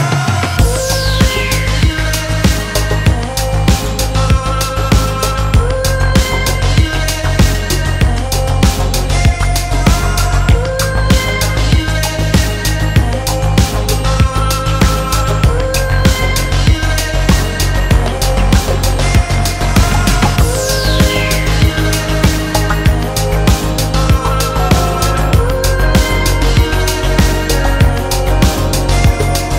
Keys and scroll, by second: 2.3 shift+F8, 2.8 shift+F7, 5.1 shift+F6, 17.4 ctrl+l.